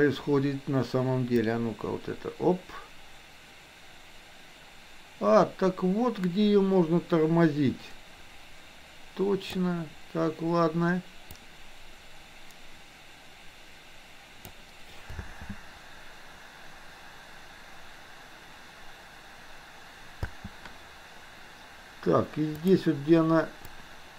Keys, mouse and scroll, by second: 1.4-9.6 drag, 11.4-14.6 drag, 15.2 space, 20.2 space, 22.6 click, 23.7-24.1 drag.